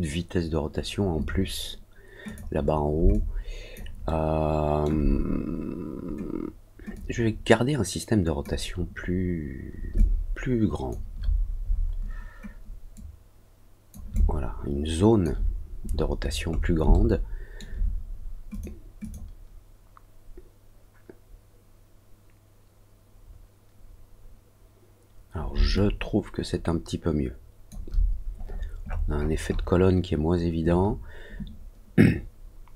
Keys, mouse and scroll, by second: 2.2 click, 3.0 alt+click, 4.0 alt+middle click, 6.9-8.4 drag, 9.9 alt+click, 11.2 middle click, 11.6 middle click, 12.9 click, 14.1-15.2 alt+drag, 15.8 scroll down 1, 15.9 scroll up 1, 16.1-16.6 scroll down 2, 16.8 alt+middle click, 18.4 click, 18.9 click, 25.7-27.6 alt+drag, 28.3 middle click, 28.5-29.5 scroll up 4, 29.5 middle click.